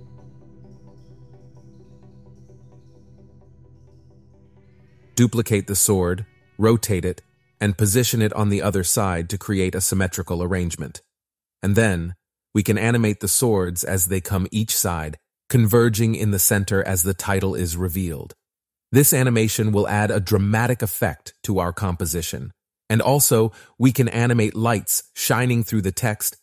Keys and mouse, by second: 0.0 ctrl+space, 0.0 KP_1, 6.0 KP_1, 6.5 KP_8, 6.5 KP_0, 7.1 KP_Enter, 8.2 click, 11.1 shift+click, 12.3 shift+click, 17.1 KP_1, 17.7 click, 17.9 click, 23.6 i, 26.3 ctrl+s.